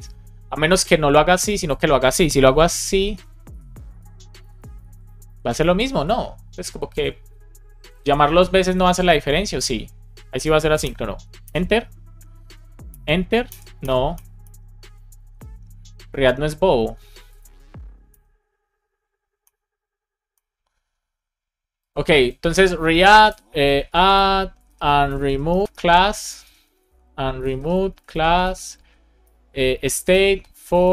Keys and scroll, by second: 2.3 BackSpace, 3.7 Down, 4.2 shift+Right, 5.5 BackSpace, 5.8 super+s, 10.7 Return, 11.3 Return, 12.7 Return, 13.3 Return, 14.0 Return, 15.1 super+r, 18.0 Return, 19.3 Return, 20.2 Return, 23.3 space, 24.1 space, 24.7 space, 25.4 BackSpace, 26.4-30.8 typing.